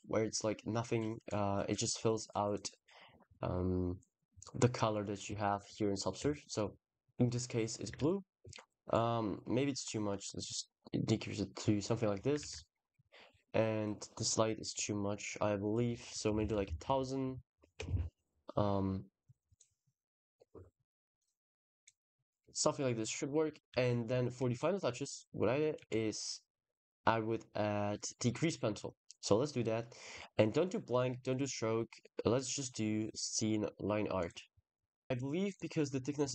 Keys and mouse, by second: 1.2-2.3 drag, 7.8 ctrl+s, 8.7-9.9 drag, 11.6 click, 12.3 ctrl+s, 13.6 click, 14.0 click, 14.5 click, 15.6-17.7 shift+drag, 16.4 shift+0, 19.1 s, 19.3 click, 21.0 click, 21.6 click, 22.4 ctrl+s, 23.1 click, 23.6 ctrl+s, 24.2 shift+a, 25.6 shift+a, 35.3-36.3 middle drag.